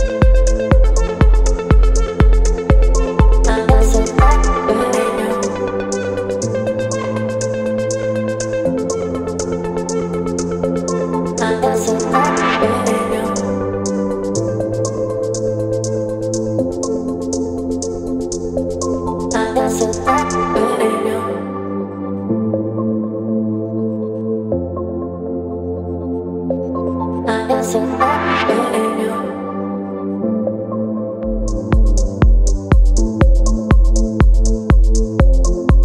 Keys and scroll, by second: 2.6 space, 13.7 Return, 17.7 ctrl+t, 24.3 Return, 27.1 space, 29.2 t.